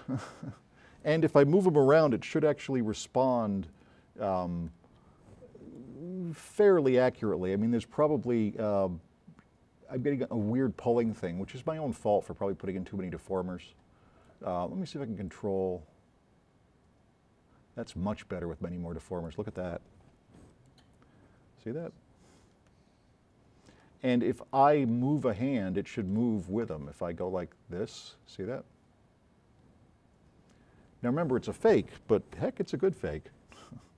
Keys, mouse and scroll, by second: 2.2 s, 2.5-5.9 right drag, 6.2 scroll up 4, 7.0 s, 7.3 click, 15.3 click, 20.5 s, 20.5 right click, 26.1 click, 26.8 v, 27.2 click, 32.5 z.